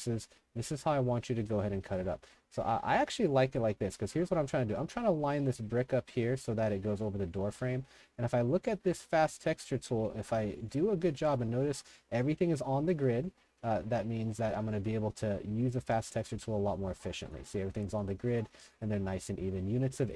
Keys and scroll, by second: 3.5 w, 3.8 w, 4.2 w, 7.0-8.0 typing, 11.2 s, 13.3 3, 19.2-20.1 typing.